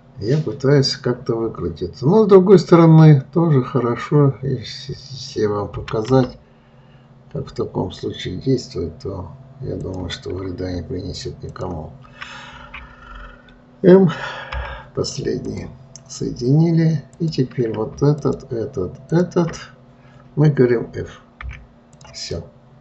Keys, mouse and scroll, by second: 11.9 shift+click, 17.5 click, 18.5 shift+click, 19.5 shift+click, 21.8 f, 22.3 click, 22.7-22.8 middle drag.